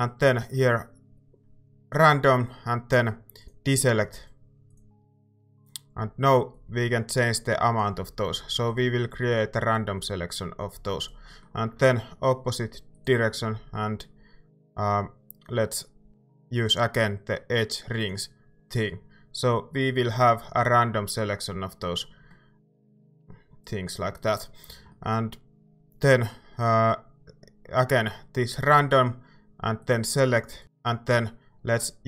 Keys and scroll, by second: 24.7 a.